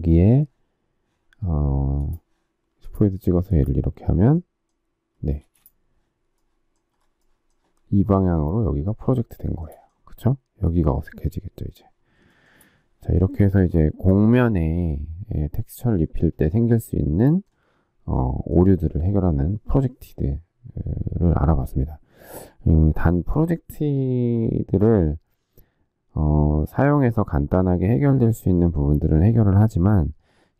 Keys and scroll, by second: 5.3 space.